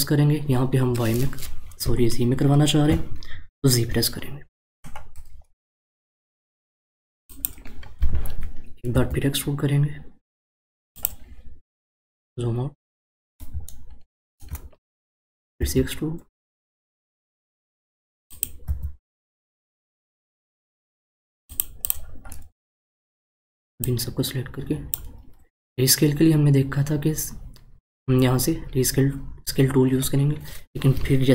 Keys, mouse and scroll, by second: 8.9 e, 12.0-13.0 scroll down 1, 13.7-15.6 shift+middle drag, 15.6 e, 21.8 click, 23.8 click.